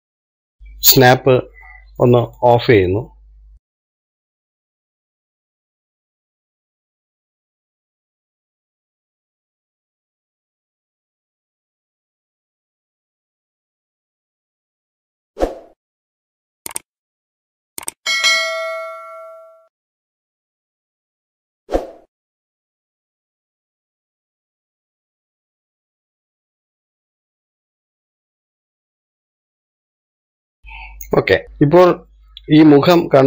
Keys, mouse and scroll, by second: 3.6 click, 7.2 shift+middle click, 7.4 scroll up 1, 7.6 shift+middle click, 7.8 scroll down 1, 7.9 shift+middle click, 8.6 KP_1, 9.0 shift+middle click, 9.5 click, 10.5 click, 12.0 KP_3, 12.3-13.3 shift+middle drag, 13.3 scroll down 1, 13.4 shift+middle click, 14.4 click, 15.1 click, 16.3 shift+middle click, 16.9 click, 17.3 click, 18.0-19.0 drag, 19.3 click, 20.2 click, 21.2 shift+middle click, 21.9 click, 22.2 click, 23.3 shift+middle click, 23.5 click, 23.7 click, 24.0 shift+middle click, 24.2 click, 24.8 shift+middle click, 25.1 click, 25.6 shift+middle click, 25.9 click, 26.1 click, 26.5 shift+middle click, 26.8 click, 27.0 click, 27.4 shift+middle click, 28.0 shift+middle click, 28.2 click, 29.0 scroll down 3, 29.1 shift+middle click, 29.7 scroll up 1, 29.9 shift+middle click, 30.3 scroll up 3, 30.5 shift+middle click, 31.4-31.9 shift+scroll up 1, 32.1-33.2 middle drag.